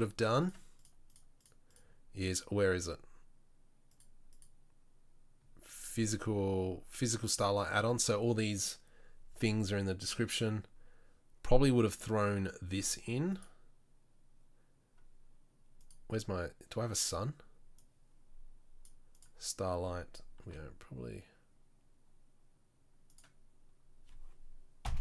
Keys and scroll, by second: 20.7 r.